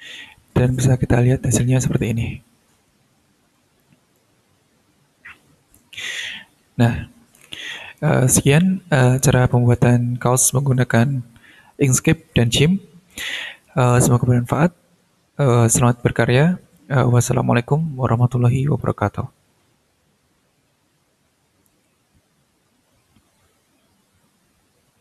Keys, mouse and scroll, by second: 0.4 click, 1.8 click, 3.8 click, 4.7-5.1 scroll down 2, 5.5 scroll up 2, 5.7-6.0 scroll down 2, 6.7 scroll up 2.